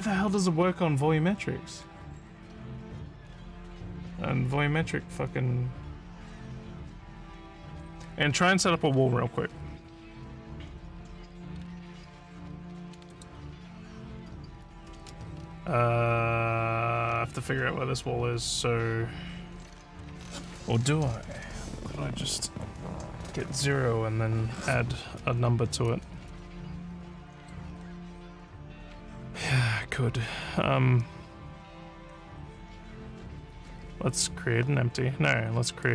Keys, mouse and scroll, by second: 13.1 click, 15.4 alt+scroll, 17.1 alt+scroll up 2, 27.4 click, 35.8 click.